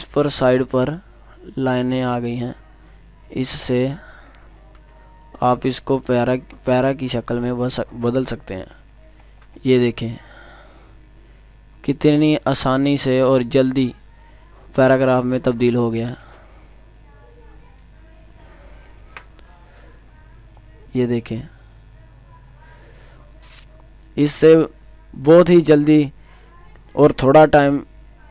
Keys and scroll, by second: 18.9 ctrl+z.